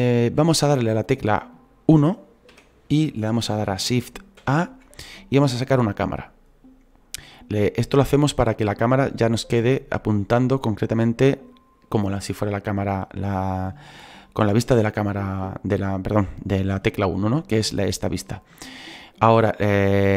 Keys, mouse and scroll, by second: 2.5-4.4 scroll down 1, 4.4-5.1 scroll down 1, 5.1-7.9 scroll down 1, 7.9-19.9 scroll down 1, 19.9-20.1 scroll down 1.